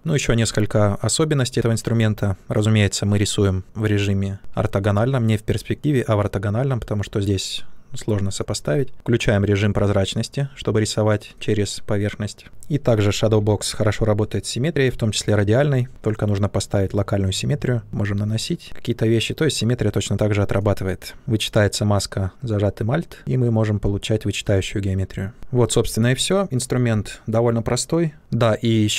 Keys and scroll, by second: 13.1 shift+f, 21.1 space.